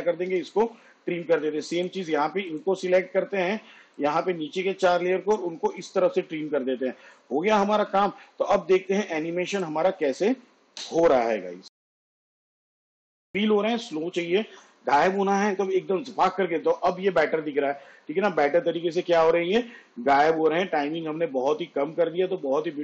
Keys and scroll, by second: 0.3 alt+[, 5.4 alt+], 10.8 space.